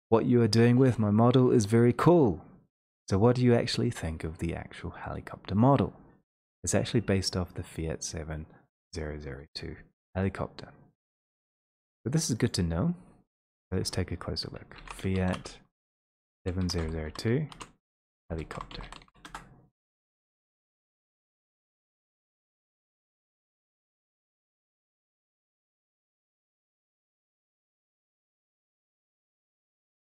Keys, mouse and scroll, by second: 11.0 click, 12.6 click, 14.7 click, 16.4 typing, 17.8-19.0 typing, 21.6 click, 29.8 click.